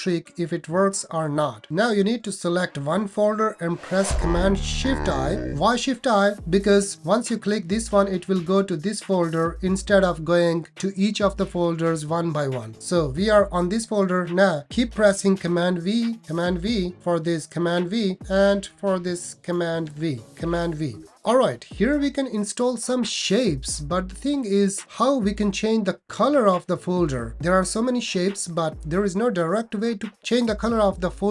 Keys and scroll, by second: 4.8 alt+super+i, 15.4 super+v, 16.4 super+v, 17.5 super+v, 19.9 super+v, 20.5 super+v.